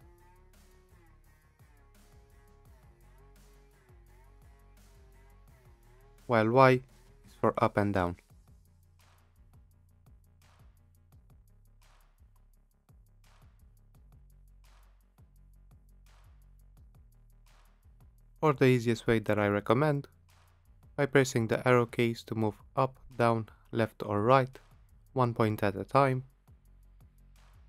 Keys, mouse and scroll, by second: 0.0-0.1 typing, 0.2 Return, 6.5-9.0 typing, 9.6 Return, 11.4 click, 12.7-14.1 typing, 14.6 Return, 16.1 click, 18.0 click, 22.9 Right, 25.1 Right, 26.5-26.9 Left.